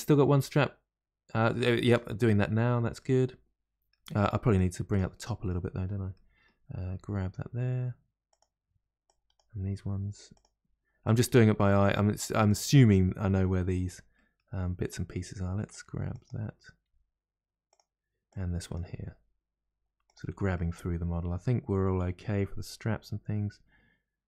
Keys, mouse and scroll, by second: 2.1-2.6 scroll down 1, 3.0-4.5 middle drag, 4.5 click, 5.1-6.8 middle drag, 6.8 g, 9.0 click, 9.8 g, 11.0 click, 11.5 g, 12.7-14.9 middle drag, 14.9 click, 15.7 click, 15.8 g, 16.8 g, 16.8 g, 18.2 click, 18.8 g, 20.5-23.6 middle drag.